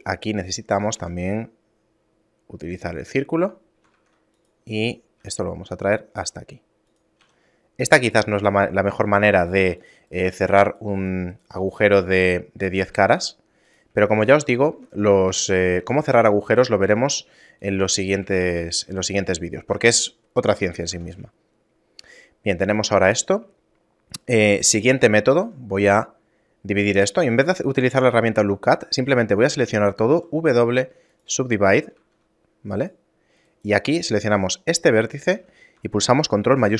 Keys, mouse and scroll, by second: 1.0 w, 4.0 ctrl+Tab, 4.7 right click, 5.2 s, 7.2 a, 9.4 ctrl+Tab, 10.1 right click, 10.4 shift+right click, 10.7 right click, 11.3 right click, 11.6 shift+right click, 12.4 shift+middle click, 13.1 e, 14.2 shift+middle click, 14.7 Tab, 15.3 a, 15.6 a, 16.0 g, 18.4 shift+a, 20.6 middle click, 20.9 Tab, 21.4 shift+middle click, 23.7 middle click, 25.3 ctrl+r, 27.4 ctrl+z, 30.1 w, 32.0 ctrl+Tab, 33.5 right click, 36.6 ctrl+shift+b.